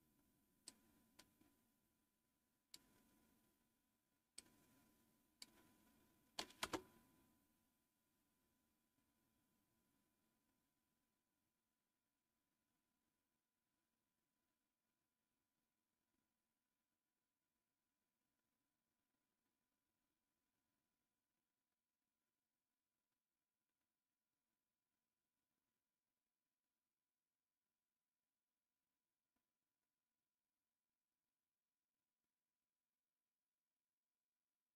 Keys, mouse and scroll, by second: 6.5 Return.